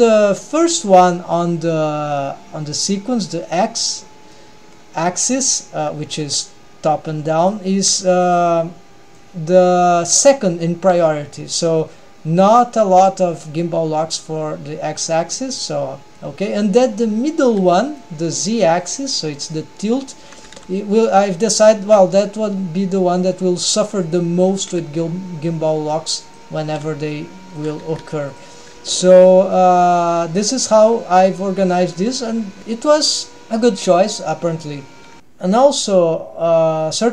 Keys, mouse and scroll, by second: 4.3-4.9 middle drag, 6.1 g, 8.0 g, 8.7-9.2 scroll up 1, 9.2 middle click, 10.9 g, 16.2-17.7 scroll up 1, 18.0-19.5 middle drag, 19.7-20.2 middle drag, 20.6 r, 24.6 r, 26.7 r, 27.9 g, 28.7 g, 29.5-30.1 middle drag, 32.0 middle click, 35.2 ctrl+alt+shift+super+r, 35.2 click.